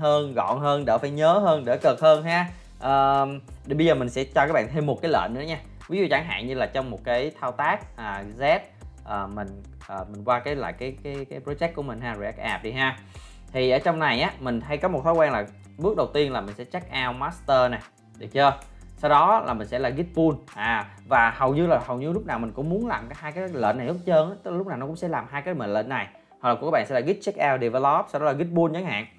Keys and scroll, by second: 13.2 ctrl+l.